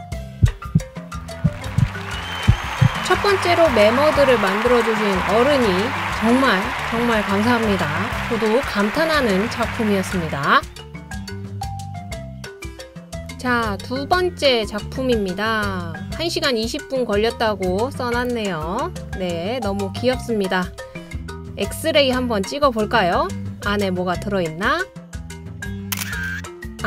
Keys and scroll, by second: 26.1 t.